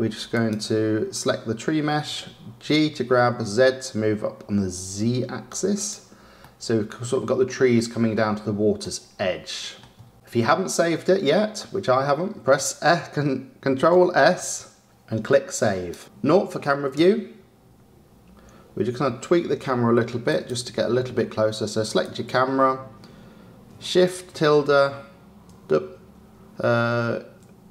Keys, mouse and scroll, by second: 0.3 click, 2.0 g, 6.4-7.1 middle drag, 7.1 scroll, 7.7-11.1 middle drag, 14.4 ctrl+s, 17.0 KP_0, 20.2 click, 21.8 click.